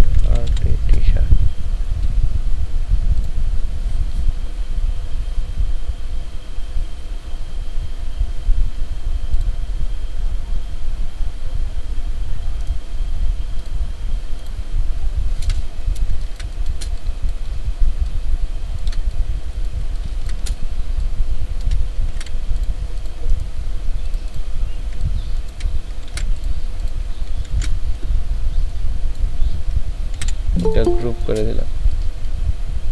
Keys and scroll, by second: 0.0-0.5 typing, 0.8 Return, 15.6 ctrl+v, 16.2 ctrl+space, 19.8 ctrl+space, 20.9 ctrl+alt+space, 22.0 ctrl+alt+space, 22.2 ctrl+alt+z, 26.1 ctrl+alt+z, 27.5 ctrl+KP_2, 30.2 ctrl+g, 30.9 ctrl+space, 31.7 ctrl+alt+space.